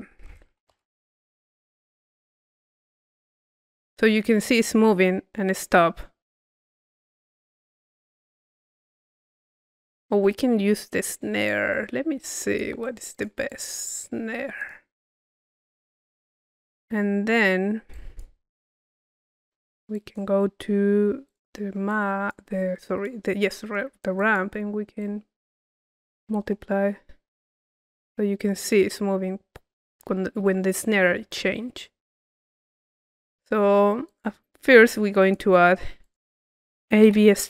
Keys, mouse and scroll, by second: 7.3-9.5 drag, 11.4 click, 12.3 click, 13.4 click, 14.6-15.6 drag, 17.3 middle click, 17.9 click, 19.0 click, 19.9-20.9 drag, 21.2-23.6 drag, 23.6 middle click, 24.2-26.4 drag, 34.0 click, 35.2-36.7 drag.